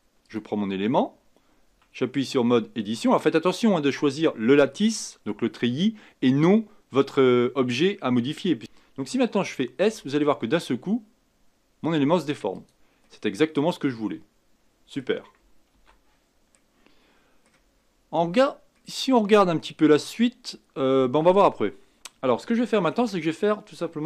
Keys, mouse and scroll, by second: 0.2 click, 1.7 Tab, 9.8 s, 13.0-15.7 middle drag, 15.7 ctrl+z, 16.5-21.7 middle drag, 23.0 Tab.